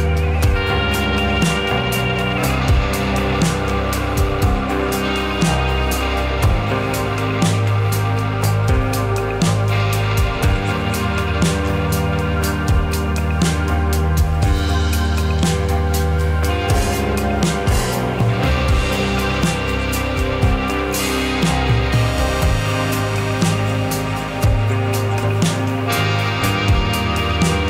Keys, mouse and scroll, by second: 0.8 g, 2.4 r, 4.4 g, 6.3 g, 7.0 click, 7.2-8.6 middle drag, 8.7 click, 9.5 middle click, 9.7 scroll down 2, 9.8 middle click, 10.2 click, 10.5 click, 11.2 click, 12.0 click, 12.6-13.6 middle drag, 14.7 click, 15.9-16.3 drag, 17.4-17.8 middle drag, 17.8-18.3 scroll up 2, 18.3-19.7 drag, 19.8 click, 20.6-22.2 middle drag, 22.2 click, 22.9-23.8 middle drag, 24.3 click, 24.4-24.9 right drag, 24.9 click, 25.1-26.3 middle drag, 26.3-27.3 scroll down 3.